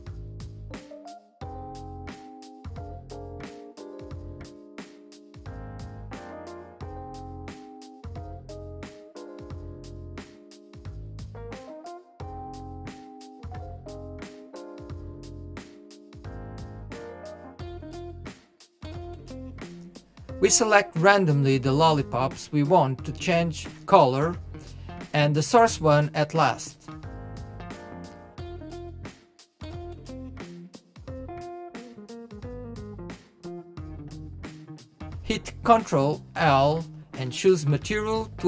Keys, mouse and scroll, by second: 1.1 click, 2.3 click, 4.7-5.9 drag, 7.3 p, 8.3-8.7 drag, 8.7-10.0 middle drag, 10.0 click, 11.4 shift+click, 11.7-12.7 middle drag, 12.7 shift+click, 14.0 shift+click, 14.8 shift+click, 15.3 shift+click, 15.9-21.8 middle drag, 21.8 click, 22.5 click, 22.9 click, 24.3 click, 24.7-26.9 middle drag, 26.9 click, 27.6 click, 28.4 shift+click, 28.8-30.0 middle drag, 30.0 shift+click, 30.4 shift+click, 30.6-31.3 middle drag, 31.3 shift+click, 31.7 shift+click, 32.4 shift+click, 35.4 shift+click, 35.8-38.4 middle drag.